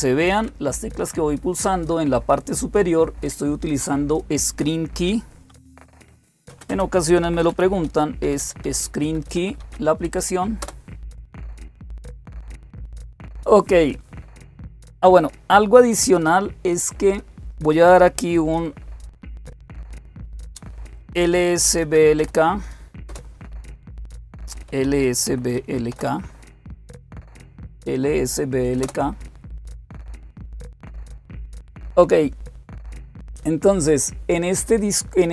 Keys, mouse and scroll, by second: 5.3-9.9 typing, 10.4 Return, 20.8-22.5 typing, 22.9 Return, 24.3-26.3 typing, 28.6 Return.